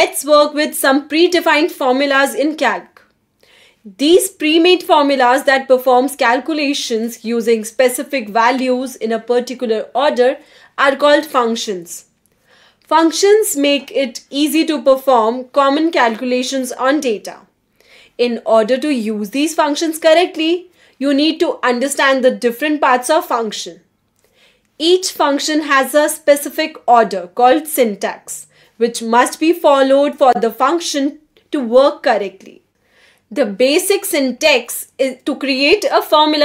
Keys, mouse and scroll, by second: 34.0 click.